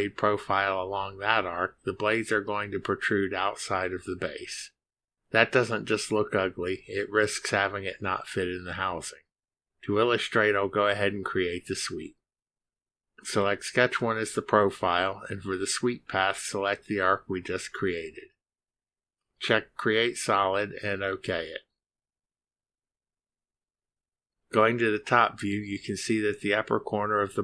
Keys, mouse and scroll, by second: 12.8 click, 15.3 click, 17.2 click, 19.3 click, 21.1 click, 22.0 click, 24.0 click, 25.7-26.9 middle drag.